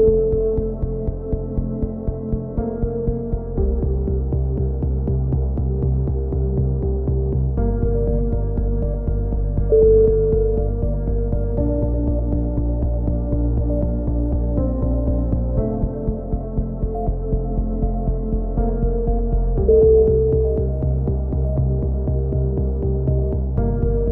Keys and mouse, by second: 0.3 z, 0.5 z, 2.1 k, 4.5 a, 4.6 z, 4.9 Tab, 7.6 middle click, 7.8-8.4 drag, 8.3 Tab, 8.4 z, 9.2-11.0 drag, 9.9 k, 11.0 right drag, 11.3 k, 14.8 a, 14.9 z, 15.2 Tab, 18.6-19.6 drag, 19.4 Tab, 20.2 z, 20.6 ctrl+r, 22.0 a, 22.9 z, 23.0 drag, 23.6 ctrl+r.